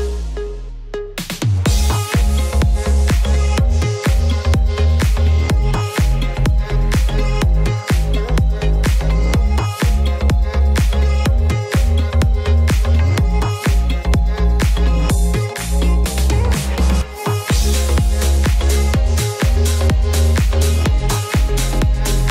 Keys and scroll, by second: 19.6 shift+p.